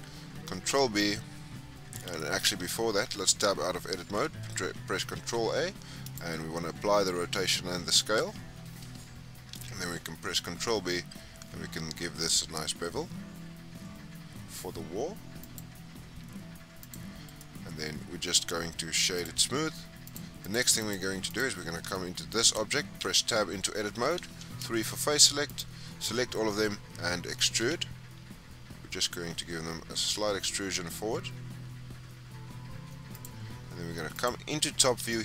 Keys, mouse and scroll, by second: 0.4 ctrl+b, 2.9 Tab, 5.1 ctrl+a, 8.1 Tab, 9.4 ctrl+b, 16.0 Tab, 16.7 click, 17.2-20.0 right drag, 20.0 click, 20.3 click, 20.7 click, 21.2 click, 21.7 scroll down 1, 21.9-22.3 middle drag, 22.3-22.9 scroll up 2, 22.9 Tab, 24.2 3, 25.4 alt+click, 27.5 e, 34.1 click, 34.6-35.0 scroll up 4, 35.0 shift+middle click.